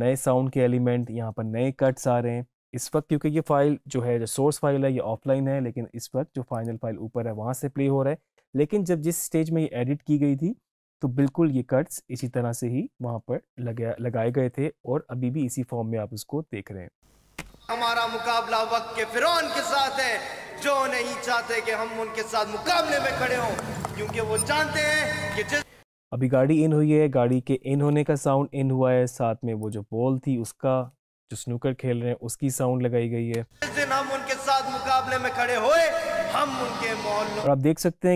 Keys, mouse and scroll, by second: 6.6 click, 18.0 space, 25.4 space, 29.7 click, 33.4 space, 37.4 space.